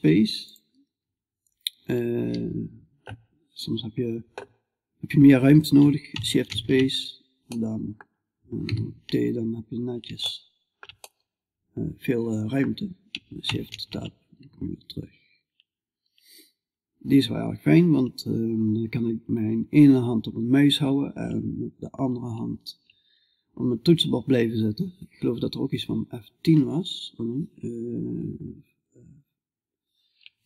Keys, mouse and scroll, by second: 5.9 shift+space, 7.0-8.1 middle drag, 8.1 t, 9.7-12.2 middle drag, 13.1 shift+space, 25.8 F10.